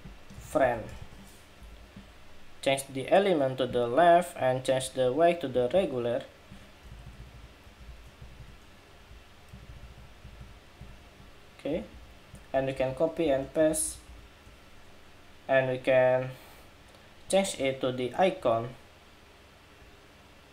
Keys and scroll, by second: 1.3 Escape, 9.2 alt+Right, 9.5 alt+Right, 9.7 alt+Right, 10.0 alt+Right, 10.5 alt+Right, 11.6 alt+Right, 12.4 super+c, 13.0 super+v, 14.3 super+v.